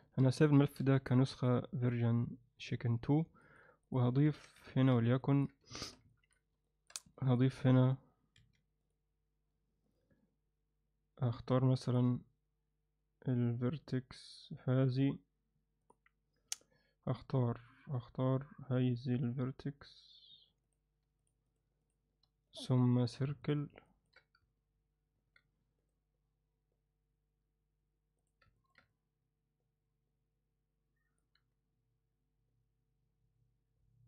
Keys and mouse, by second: 0.9 ctrl+shift+s, 3.2 ctrl+shift+s, 3.4 ctrl+alt+middle click, 3.8 click, 4.3 Tab, 4.7 ctrl+alt+middle click, 5.2 ctrl+alt+middle click, 5.7 alt+shift+middle click, 6.1 ctrl+alt+middle click, 6.6 alt+shift+middle click, 7.1 ctrl+alt+middle click, 8.4 1, 9.9 click, 11.8 click, 20.3 3, 21.5 shift+click, 23.4 right click, 23.9 ctrl+alt+middle click, 25.2 ctrl+z, 28.1 right click, 28.6 ctrl+alt+middle click, 28.9-31.2 alt+middle drag.